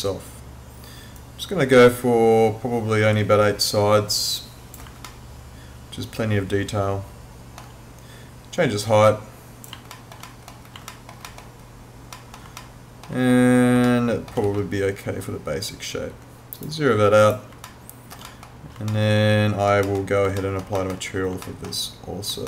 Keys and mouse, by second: 1.2 click, 5.1 alt+middle click, 8.9 click, 9.9 alt+middle click, 10.9 alt+middle click, 12.6 alt+middle click, 13.9 alt+middle click, 14.4 w, 16.6 right click, 17.7 alt+middle click, 18.9 alt+middle click, 20.4 alt+middle click, 21.5 alt+middle click.